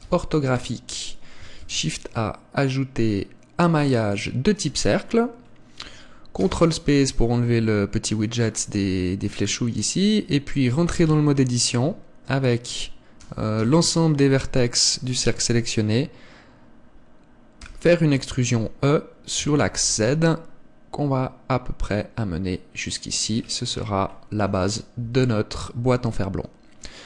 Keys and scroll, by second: 0.0 KP_5, 1.5 shift+a, 6.3 ctrl+space, 11.0 Tab, 13.2 a, 25.0 Tab.